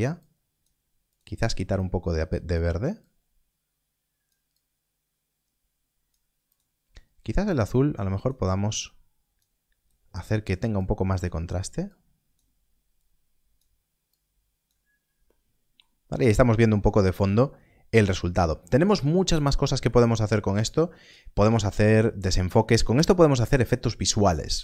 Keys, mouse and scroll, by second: 15.2 middle click, 16.0 scroll down 1, 16.8 middle click, 17.8 scroll up 1, 19.5 middle click, 20.6 click, 22.2 shift+a.